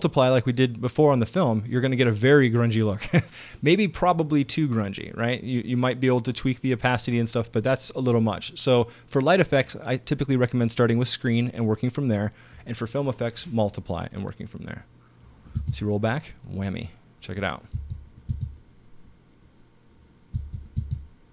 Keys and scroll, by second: 15.6 space, 17.7 space, 20.3 space.